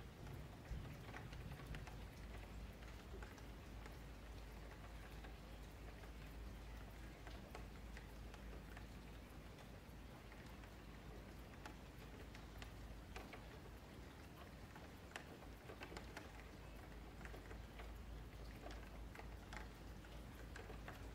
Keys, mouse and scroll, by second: 1.3 click, 2.4-3.7 middle drag, 3.7 shift+click, 4.0-5.9 shift+middle drag, 7.5-8.5 middle drag, 8.5 click, 10.9 scroll down 2, 11.1 scroll up 1, 11.3-12.4 middle drag, 12.4 click, 13.2 middle click, 13.7 ctrl+click, 14.0-15.6 middle drag, 15.6 shift+click, 18.1-21.1 middle drag.